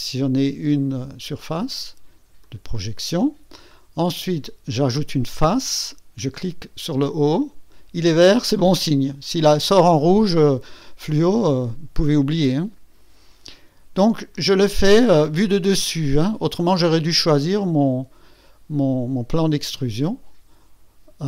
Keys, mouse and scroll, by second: 2.4 click, 4.7 click, 7.0 click, 11.1 click, 14.3 click.